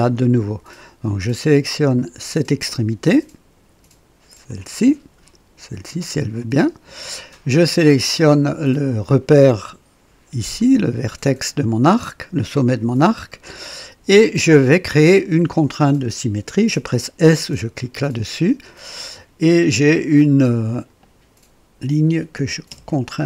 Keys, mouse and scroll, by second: 2.3 click, 4.4 click, 6.4 click, 12.5 click, 18.0 s, 20.7 click, 22.4-23.2 typing.